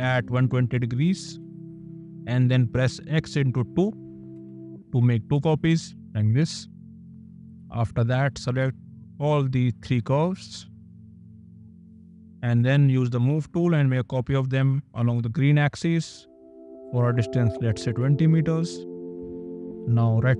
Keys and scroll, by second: 0.1 KP_2, 0.4 KP_0, 1.4 Return, 2.4 KP_Multiply, 3.2 2, 4.4 Return, 6.4 space, 12.5 m, 17.3 KP_0, 17.9 Return, 18.1 \, 19.8 space.